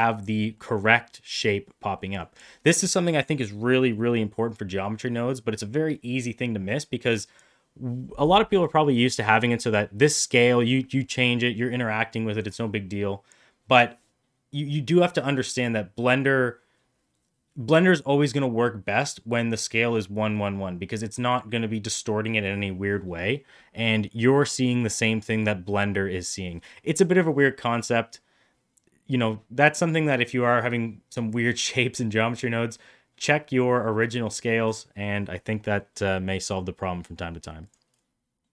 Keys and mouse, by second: 0.4 middle drag, 1.8 middle click, 23.5 middle click, 35.7 middle click, 36.7 middle click, 38.4 middle click.